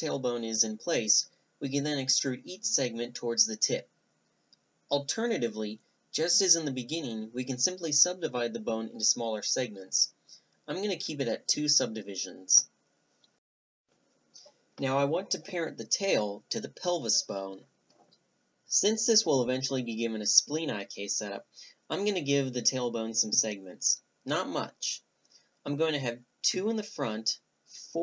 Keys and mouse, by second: 0.2 click, 0.6 e, 1.1 middle drag, 2.3-2.7 middle drag, 2.7 Tab, 3.5 middle click, 3.8 Tab, 4.1-5.3 middle drag, 5.3-5.9 right drag, 5.9 click, 6.0 middle drag, 6.1 click, 6.3 a, 6.5-9.0 right drag, 7.0 Delete, 8.0 g, 9.4-10.7 right drag, 9.7 w, 10.3 w, 11.1-12.4 middle drag, 12.8 middle click, 12.9-14.0 drag, 13.5 a, 14.0-15.5 right drag, 14.6 ctrl+p, 16.2 click, 16.7-18.4 middle drag, 16.7 a, 17.1 Tab, 18.1 Tab, 19.3 Tab, 21.4-22.6 right drag, 22.6-23.6 middle drag, 23.6-27.5 right drag, 27.9 Tab.